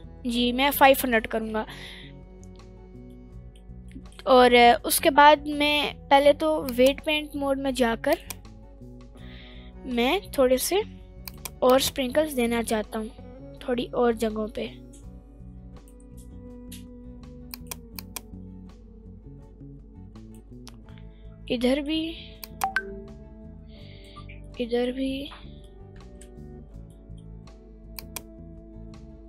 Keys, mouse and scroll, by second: 0.0-0.5 middle drag, 0.7-1.2 scroll down 2, 1.0 scroll up 2, 1.2 middle click, 2.8 scroll up 1, 3.1-3.5 middle drag, 3.6 scroll down 2, 3.9 middle click, 4.4 middle drag, 9.0 click, 9.0 scroll up 2, 9.2 middle click, 10.6 f, 12.0 click, 17.5 click, 18.3 click, 21.5 middle click, 22.8 click, 24.8 middle click, 26.5 ctrl+z, 26.9 middle click, 28.3 click.